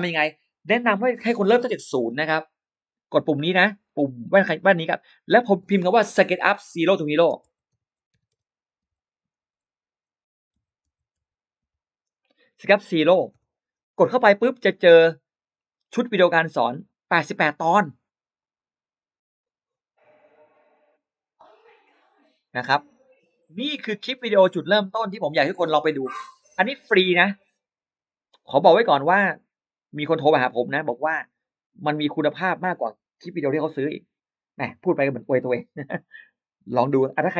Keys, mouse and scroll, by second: 4.3 click, 6.1-11.5 typing, 13.2 Return, 15.3-16.0 scroll down 2, 15.7 middle click, 16.1-16.4 scroll up 1, 18.2 click, 25.1 click, 26.9 click, 28.7-32.2 drag.